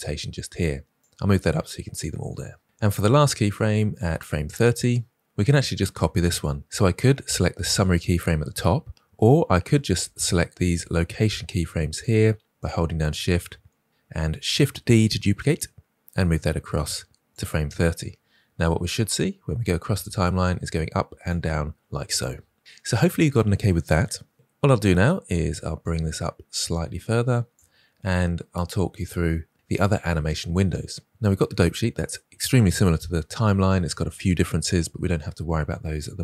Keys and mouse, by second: 0.9-2.0 drag, 4.1 click, 7.7 click, 10.1-11.3 drag, 11.8 shift+click, 12.5-13.0 shift+drag, 14.9 shift+d, 18.5-21.2 drag, 25.7-27.5 drag, 28.8-36.2 drag.